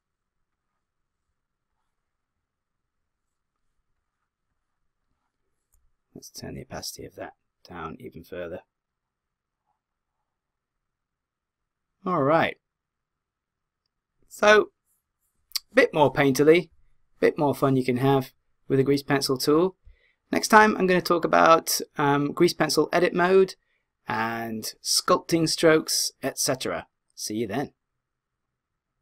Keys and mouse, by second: 8.5 click.